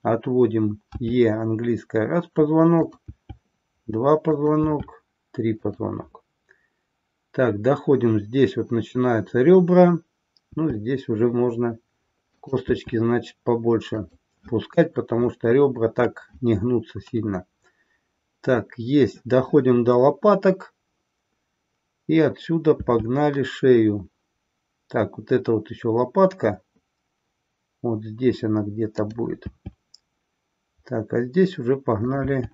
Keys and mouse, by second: 3.1 e, 4.3 click, 12.5 click, 12.8 e, 32.1 click, 32.2 e.